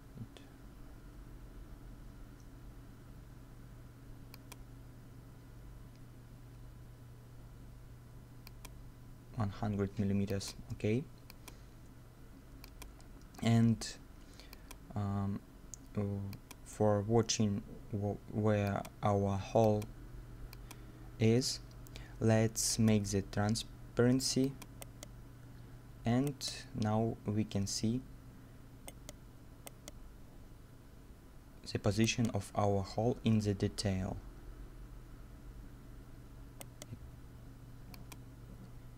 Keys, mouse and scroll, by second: 0.0 right click, 21.7-24.0 scroll down 1, 24.8 right click, 26.0 scroll up 1, 26.3 right click, 28.9 right click, 30.7-31.4 scroll down 1, 32.0 middle click, 32.0 right click, 34.9 scroll up 1, 36.2 scroll down 1, 36.6 right click.